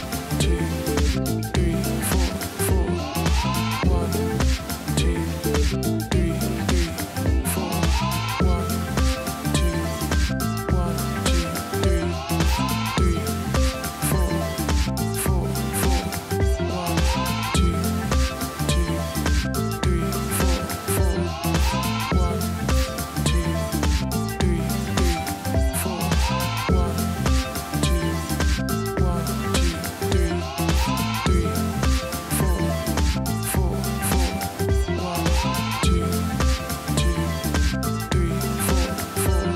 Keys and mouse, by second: 1.3 click, 3.5 g, 5.2 click, 7.9 click, 10.6 click, 12.9 click, 14.2 click, 17.7 click, 18.9 click, 20.6 click, 22.6 click, 26.5 click, 27.1 space, 27.4 click, 27.5 space, 29.5 click, 30.9 click, 33.1 click, 34.6 click, 35.7 space, 35.9 click, 36.5 click, 37.4 space, 37.5 click, 37.6 space, 38.0 click, 39.0 click.